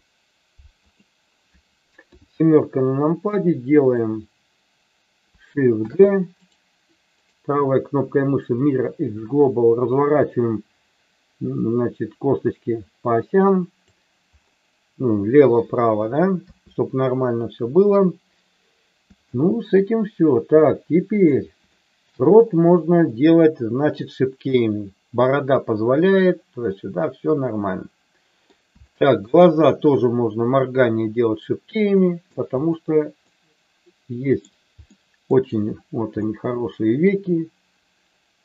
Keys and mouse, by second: 2.1 KP_7, 3.3 click, 5.8 shift+d, 8.8-9.9 right drag, 9.9-13.8 drag, 16.4 KP_3, 19.2 shift+middle click, 20.6 middle click, 21.7 shift+middle click, 23.1 middle click, 26.7-28.4 middle drag, 28.8 shift+middle click, 31.9 middle click, 33.2-34.4 middle drag, 34.8 middle click, 36.2-38.4 middle drag.